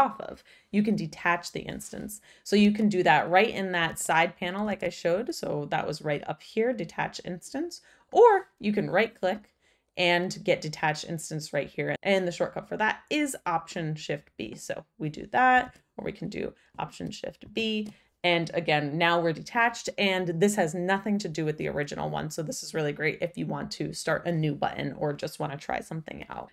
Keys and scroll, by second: 2.6 super+z, 3.8 super+z, 4.6 super+z, 15.6 super+z, 17.4 alt+super+b.